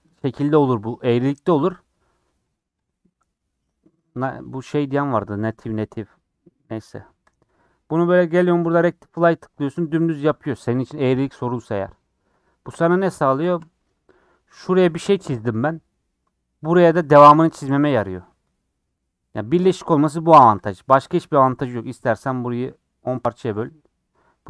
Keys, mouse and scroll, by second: 0.5 ctrl+z, 7.3-10.2 drag, 13.0 r, 20.6 click, 21.4 scroll down 2, 21.6 middle click, 22.2-22.7 scroll up 3, 22.7-24.4 middle drag.